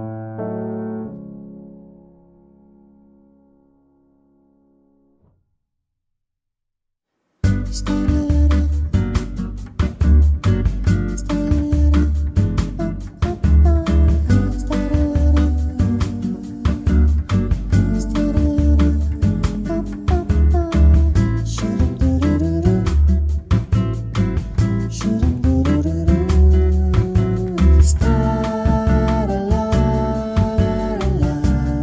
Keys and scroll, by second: 2.5 ctrl+x, 2.9 Delete, 3.2 ctrl+v, 3.6 Tab, 3.9-4.7 typing, 5.5 ctrl+a, 6.8 ctrl+z, 7.4 ctrl+z, 10.4 Tab, 15.1 ctrl+z, 18.0 ctrl+z, 22.9 ctrl+z, 27.3 ctrl+z.